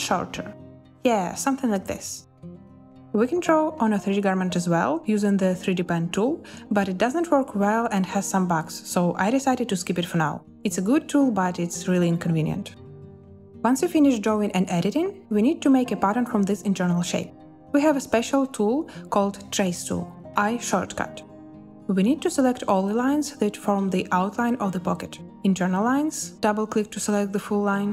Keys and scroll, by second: 19.7 i.